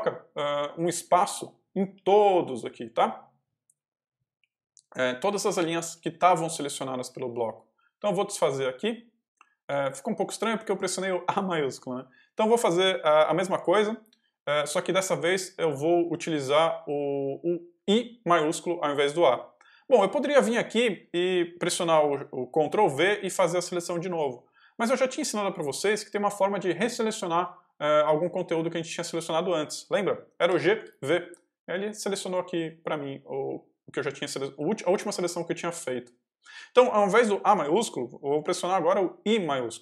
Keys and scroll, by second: 1.2-3.3 typing, 4.3 k, 4.8 j, 6.2 k, 9.6 u, 20.8 h, 30.4 g, 30.7 v, 39.2 shift+i.